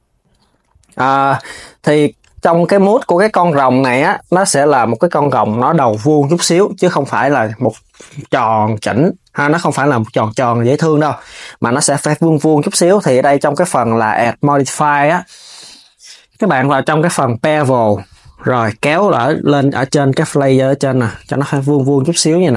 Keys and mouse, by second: 0.9 Tab, 1.6 s, 12.9-16.1 drag, 18.6-19.6 drag, 22.1 Tab, 22.4 KP_3.